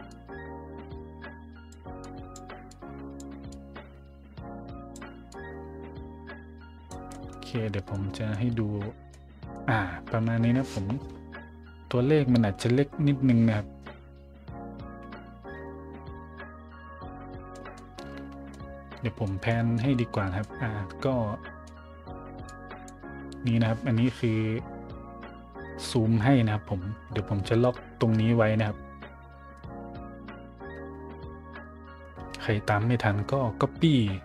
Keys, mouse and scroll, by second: 0.1-1.7 drag, 2.0 click, 2.7-3.1 drag, 3.5-4.9 drag, 5.3-6.9 drag, 7.1 middle click, 7.6 middle click, 7.9 middle click, 9.1-9.5 middle drag, 17.5 middle click, 18.0 middle click, 18.1 middle click, 18.2 middle click, 18.5 middle click, 19.5 middle click, 20.1 middle click, 20.4-21.6 middle drag, 22.5 click.